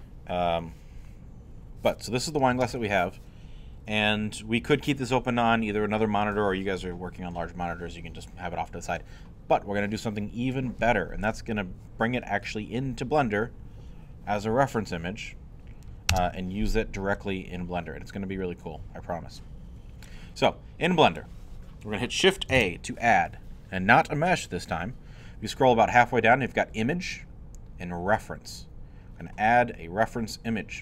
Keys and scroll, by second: 2.5 space, 16.1 space, 22.6 shift+a.